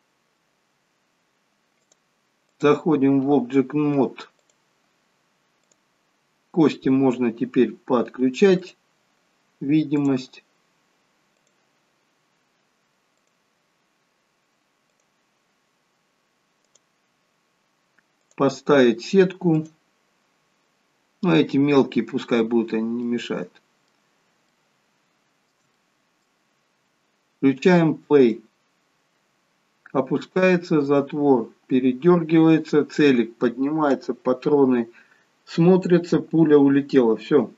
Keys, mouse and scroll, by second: 1.7 click, 9.8 click, 13.2 click, 23.0 middle click, 23.0 scroll up 1, 24.6 shift+middle click, 24.6 shift+scroll up 1, 25.7 middle click, 28.1 click.